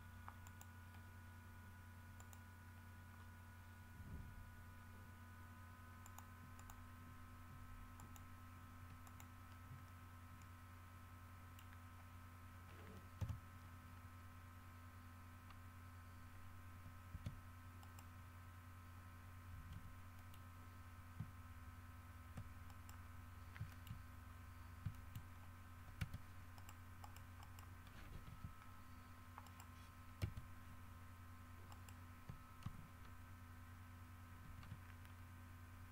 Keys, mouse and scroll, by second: 0.6 middle click, 2.4 middle click, 3.3 scroll down 2, 4.9 scroll down 2, 6.2 middle click, 6.8 click, 8.2 click, 9.2 click, 10.6-11.9 middle drag, 12.1 scroll up 1, 13.4 KP_7, 17.3 Tab, 18.0 right click, 19.9 g, 20.3 click, 22.8 ctrl+middle click, 23.5 scroll up 2, 23.9 shift+middle click, 24.4 shift+scroll down 3, 24.9 scroll up 2, 25.1 shift+middle click, 25.7 scroll up 2, 26.2 Tab, 26.7 middle click, 27.2 middle click, 28.5 Escape, 28.8-29.2 scroll down 2, 29.6 right click, 30.4 Tab, 30.7-31.3 scroll up 2, 31.9 right click, 32.3-32.6 scroll up 2, 34.6 shift+d.